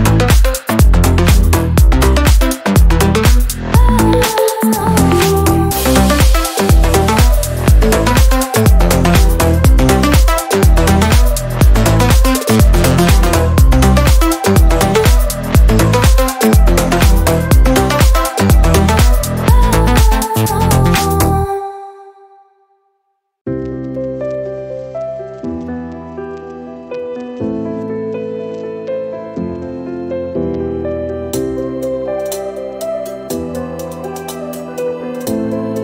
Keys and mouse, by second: 1.9 click, 2.6-5.0 middle drag, 5.0 click, 5.6-7.5 middle drag, 7.5 click, 8.4-9.4 middle drag, 9.4 ctrl+a, 10.2 f, 13.9 click, 14.5-20.2 drag, 20.4 u, 24.7-27.1 drag, 27.1-30.5 middle drag, 30.5-33.0 drag, 33.0-34.3 middle drag, 34.3-35.8 drag.